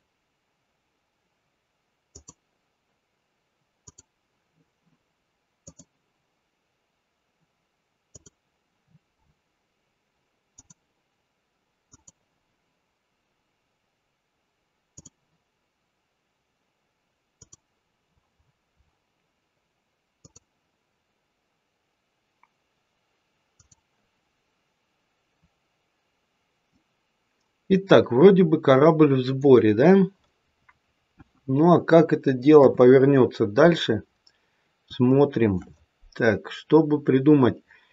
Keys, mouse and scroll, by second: 5.5 click, 14.8 click, 25.4-26.6 scroll up 3, 26.6 middle click, 31.0 KP_1, 32.5 KP_3, 33.3-34.1 scroll down 2, 35.0 shift+middle click.